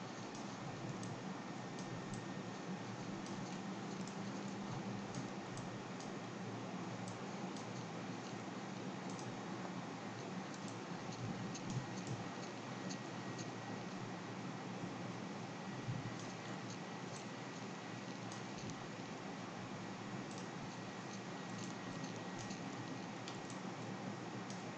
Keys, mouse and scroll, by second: 0.0-5.5 typing, 1.8 drag, 3.5 click, 5.1 click, 6.0 click, 6.3 middle click, 7.0 x, 7.5 x, 7.6-9.7 drag, 9.7-10.6 scroll up 2, 10.6-11.5 x, 12.0-13.5 c, 13.6-16.1 x, 16.2 click, 16.5-17.1 middle drag, 16.5-17.0 scroll, 17.6-18.2 x, 18.3-20.7 drag, 20.7-21.4 scroll down 1, 21.4 scroll down 1, 21.5-24.7 typing, 22.4 drag, 22.7-23.1 scroll down 4, 23.1-23.4 drag.